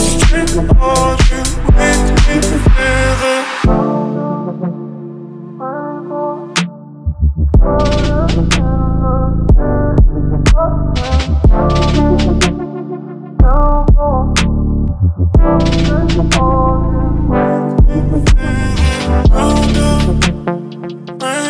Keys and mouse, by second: 1.3 y, 3.1-5.4 drag, 5.4 y, 7.7 click, 8.5 y, 11.1 click, 11.4 middle click, 12.9 ctrl+f, 16.6 click, 18.7 KP_1.